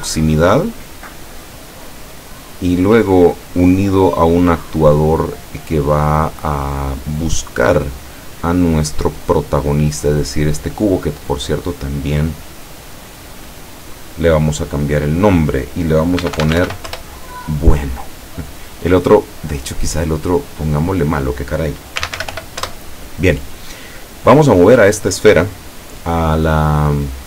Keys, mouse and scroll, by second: 0.4-1.6 drag, 2.7-7.0 drag, 10.1 right click, 11.7 click, 16.2 b, 16.4 u, 16.6 n, 16.7 o, 16.9 Return, 19.9 right click, 21.1 click, 22.0 m, 22.2 l, 22.3 o, 22.7 Return, 24.3 right click, 24.8 right click.